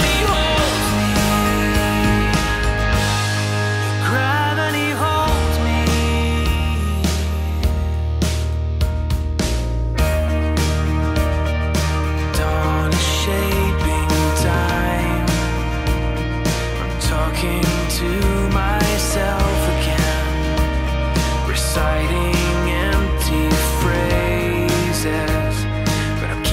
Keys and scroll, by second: 6.7 super+z, 7.0 super+z, 17.5 scroll, 19.2 scroll, 22.8 super+z, 26.0 super+z.